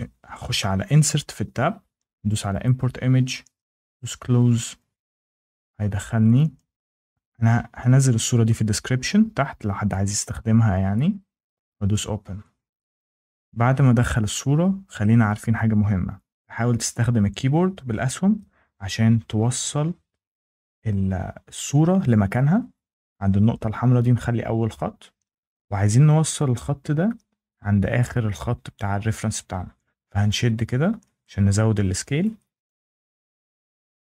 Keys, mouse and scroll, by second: 2.5 click, 3.9 click, 6.1 click, 6.3 click, 7.1 click, 11.8 click, 14.2 click, 16.3 scroll down 2, 16.7 Down, 16.8 Down, 17.0 Down, 17.2 Down, 17.3 Down, 17.5 Down, 17.7 Down, 17.9 Down, 18.0 Down, 18.2 Down, 18.4 Down, 18.5 Down, 18.7 Down, 18.9 Down, 19.1 Down, 19.2 Down, 19.4 Down, 19.6 Down, 19.8 Down, 19.9 Down, 20.1 Down, 20.3 Down, 20.4 Down, 20.6 Down, 20.8 Down, 21.0 Down, 21.2 Down, 21.4 Right, 21.6 Right, 21.8 Right, 22.0 Down, 22.2 Right, 22.4 Right, 22.6 Right, 23.1 Right, 23.9 Right, 24.6 Down, 31.1 click, 32.5 click, 33.9 click.